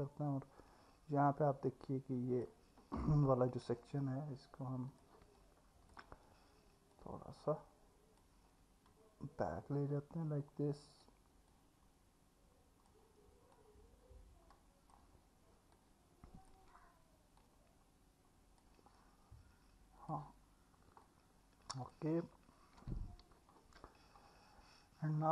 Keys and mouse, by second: 0.3-2.4 middle drag, 4.9 click, 5.4 alt+middle click, 7.0-8.2 drag, 11.6-12.9 drag, 13.5 click, 15.7 click, 17.4 click, 20.0 click, 21.0-21.3 alt+middle drag, 23.3 alt+Tab.